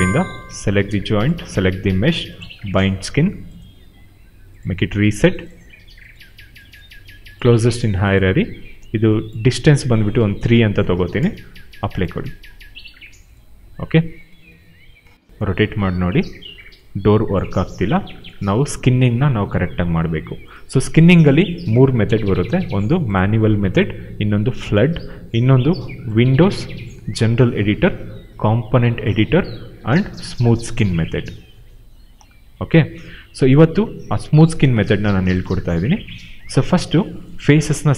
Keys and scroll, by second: 10.1 3, 11.1 Return, 17.5 ctrl+z.